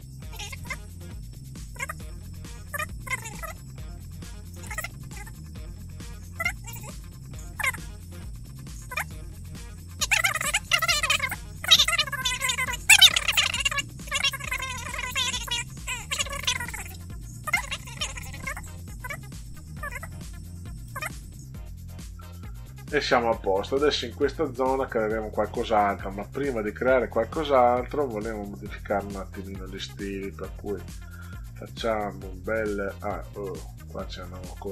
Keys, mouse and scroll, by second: 0.1 click, 0.2 click, 0.9 click, 1.5 click, 2.1 click, 3.3 click, 4.4 click, 5.0 click, 5.2 click, 5.6 click, 6.2 click, 7.1 click, 8.1 click, 9.4 click, 9.7 click, 10.0 click, 11.7 click, 13.2 F2, 13.9 click, 14.5 click, 14.7 click, 15.2 click, 15.9 click, 16.5 click, 17.6 click, 18.3 click, 18.5 click, 18.8 click, 19.0 click, 19.4 click, 19.9 click, 20.3 click, 24.2 scroll down 2, 28.7 click, 30.4 click, 31.9 click, 33.5 click.